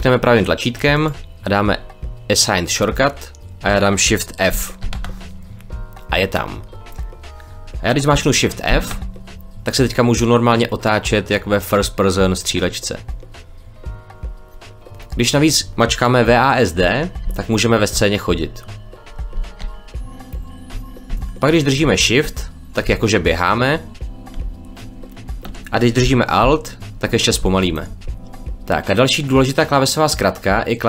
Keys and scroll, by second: 4.7 shift+f, 8.6 shift+f, 16.7 w, 17.1 d, 22.7 shift+d, 27.3 alt+d, 27.8 alt+d, 28.0 alt+w.